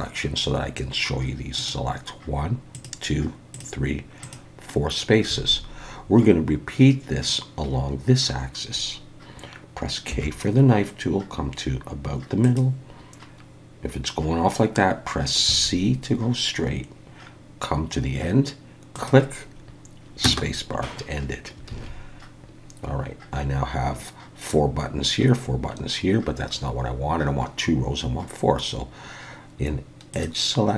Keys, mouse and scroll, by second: 1.6 click, 2.7 click, 3.5 click, 4.2 click, 5.4 alt+a, 10.1 k, 21.7 alt+a, 30.1 click.